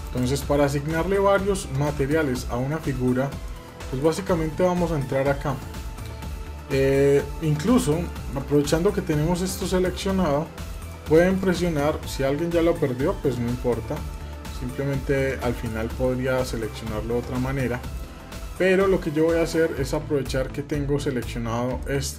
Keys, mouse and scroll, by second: 0.6 middle click, 1.3-1.7 shift+middle drag, 1.9-2.7 middle drag, 3.2-3.7 middle drag, 3.9 Tab, 4.5-7.6 middle drag, 7.8 shift+middle click, 8.3-11.3 middle drag, 11.4 middle click, 13.9-15.0 middle drag, 15.5 middle click, 16.0-16.6 scroll up 2, 16.6-17.7 scroll down 2, 17.7-19.2 middle drag, 19.7-20.9 middle drag, 21.6 shift+middle click.